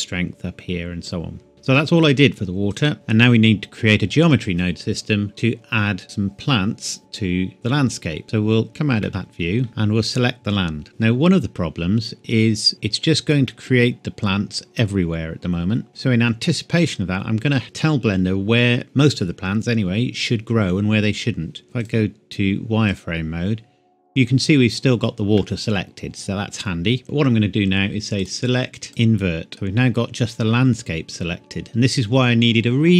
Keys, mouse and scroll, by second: 2.7 click, 2.9 middle click, 8.2-8.7 scroll down 1, 8.7 click, 9.0 middle click, 9.7 click, 13.5 middle click, 18.0 Tab, 21.8 click, 24.2-25.3 scroll down 1, 25.3 middle click, 25.5 scroll up 1, 28.1 click, 29.5 middle click, 30.3-30.6 scroll down 1.